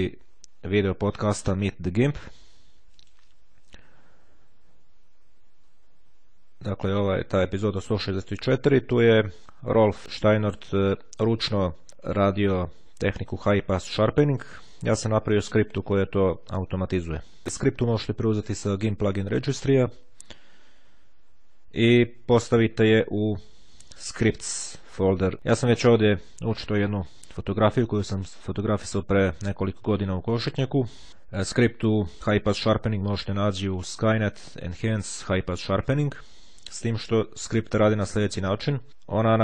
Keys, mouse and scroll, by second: 3.0 click, 4.5-5.5 scroll down 1, 5.5-6.1 scroll down 1, 6.1-7.3 scroll down 1, 13.8-16.1 scroll down 1, 17.1 scroll down 1, 31.6 click, 37.3 click.